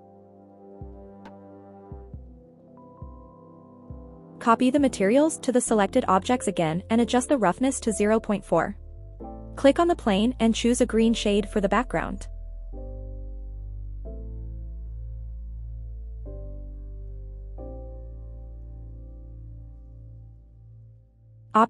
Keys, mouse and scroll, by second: 5.1 click, 8.3 click, 10.1-10.5 scroll down 3, 10.7 scroll up 1, 11.7-12.2 scroll down 1, 12.3 scroll up 1, 12.9 click, 14.4 click, 16.7 click.